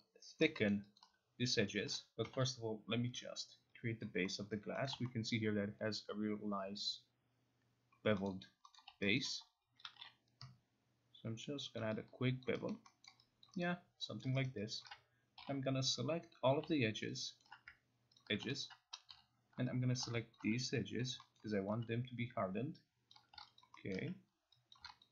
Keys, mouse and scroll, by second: 0.4 alt+click, 0.7 alt+middle click, 1.8 alt+right click, 2.4 9, 3.1 click, 4.1 click, 4.4 middle click, 4.8 middle click, 5.3 alt+middle click, 8.3 middle click, 8.8 middle click, 9.2 alt+right click, 11.8 click, 12.4 alt+click, 12.7 alt+right click, 13.1 alt+middle click, 13.4 alt+click, 13.7 alt+right click, 14.2 alt+click, 14.2 alt+middle click, 14.4 alt+right click, 14.8 alt+click, 15.4 alt+click, 15.4 0, 16.5 click, 17.1 alt+right click, 17.4 alt+middle click, 18.2 alt+middle click, 18.2 ctrl+click, 19.1 9, 20.4 shift+click, 21.0 alt+click, 21.0 shift+click, 21.4 alt+middle click, 21.7 alt+click, 23.1 shift+click, 23.6 alt+click, 24.0 alt+middle click, 24.7 shift+click, 25.0 alt+click.